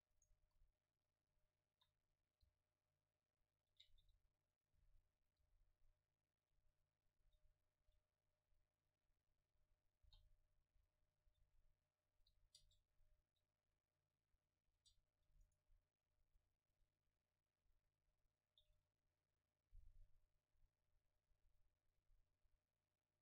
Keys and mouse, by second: 0.2-2.1 right drag, 0.5 KP_1, 1.5 click, 2.1-3.3 middle drag, 2.5 g, 3.9 click, 4.1 s, 4.8 e, 5.5 g, 5.7-7.6 drag, 7.3 s, 7.8 click, 7.9 r, 9.5-12.2 typing, 10.7-12.5 drag, 12.7 Tab, 14.2 a, 15.0 Tab, 15.5-16.6 drag, 15.5-16.6 right drag, 16.2 middle click, 16.8 Tab, 17.2 click, 17.2 middle click, 17.2 right click, 17.6 a, 18.0 a, 18.5-20.3 middle drag, 18.5-20.3 right drag, 18.7 shift+a.